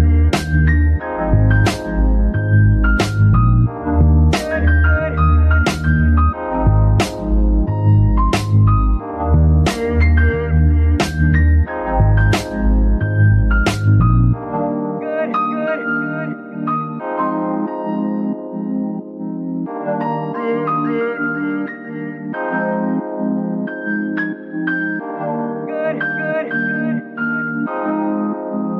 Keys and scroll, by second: 1.8 KP_Decimal, 21.0 KP_0, 26.5 space.